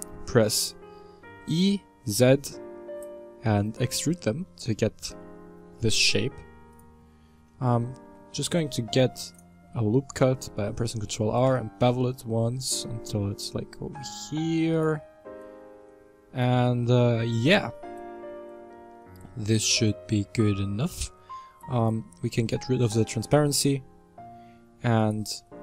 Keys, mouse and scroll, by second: 0.6-1.3 scroll down 4, 1.3 e, 4.4-5.8 shift+middle drag, 5.8 g, 7.8 ctrl+r, 11.3 ctrl+b, 15.9-21.8 middle drag, 21.8 click, 22.4-25.0 middle drag, 25.0 alt+right click.